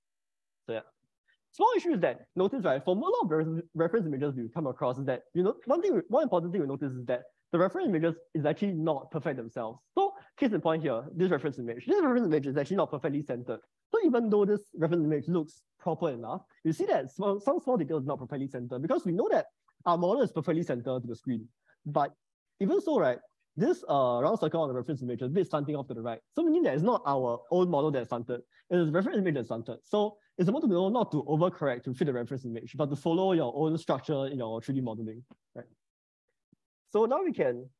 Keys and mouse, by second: 22.3 shift+middle click.